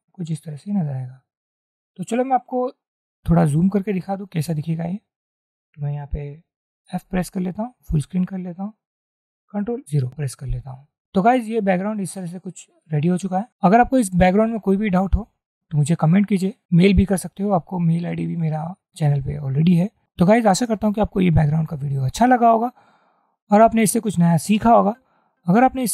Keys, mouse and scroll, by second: 1.2 double click, 7.3 f, 7.5 f, 9.8 ctrl+0.